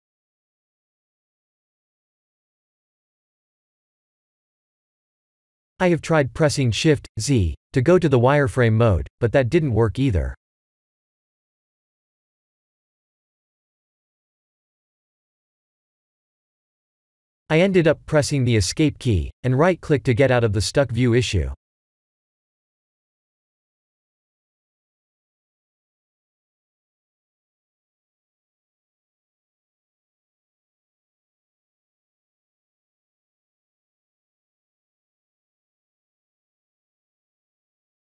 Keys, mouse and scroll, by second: 19.9 right click, 20.0 right click, 22.1 click, 23.5 0, 25.2 middle click, 26.8 middle click, 27.4 KP_1, 27.9 KP_7, 30.0 click, 32.0 click, 34.3 click, 35.7-36.7 scroll down 4, 36.7 click.